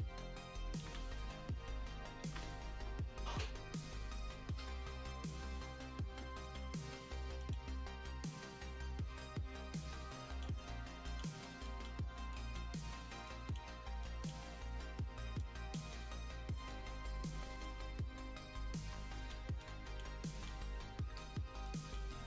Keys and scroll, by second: 0.8 ctrl+z, 2.2 ctrl+z, 21.4 space.